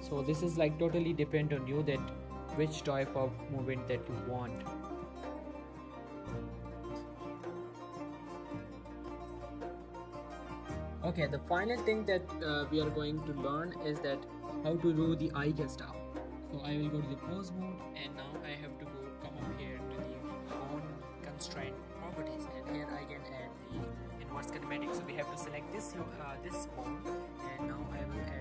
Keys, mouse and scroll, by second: 1.0 r, 1.7 right click, 2.1-2.6 click, 2.8 r, 3.9 right click, 4.2 ctrl+z, 4.7 shift+middle click, 5.5 click, 5.6 r, 6.0 right click, 6.2 shift+middle click, 6.5 click, 6.8 r, 7.2 right click, 7.5 ctrl+z, 8.1 click, 8.2 r, 8.9 right click, 9.3 shift+middle click, 9.6 r, 10.5 right click, 10.7 scroll down 2, 11.7 click, 13.9 scroll down 1, 14.1 shift+middle click, 14.2 shift+scroll up 1, 14.6 click, 16.8 Tab, 17.3 middle click, 19.1 click, 22.8 click, 24.5 shift+middle click, 24.7 shift+scroll up 2, 25.0 click.